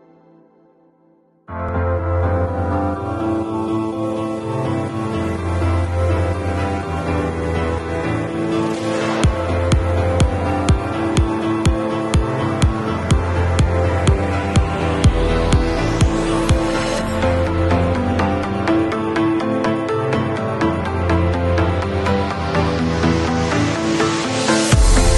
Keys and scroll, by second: 5.1-5.9 typing, 7.9 ], 10.1 ], 12.5 [, 14.9 ], 18.0 [.